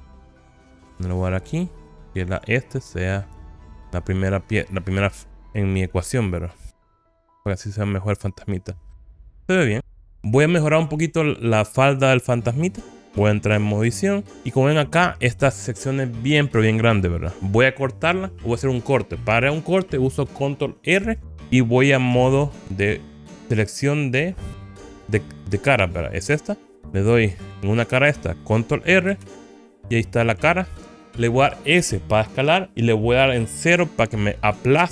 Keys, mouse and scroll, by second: 2.3-3.9 drag, 4.6-9.4 middle drag, 14.3 Tab, 14.6-16.4 scroll up 2, 22.2 3, 27.5 click, 29.1 ctrl+r.